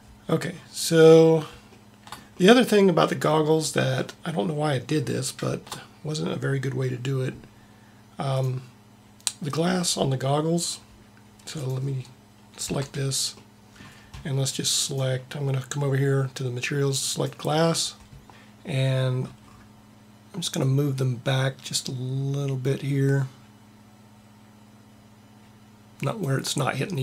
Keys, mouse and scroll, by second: 12.8 Tab, 20.6-22.3 drag.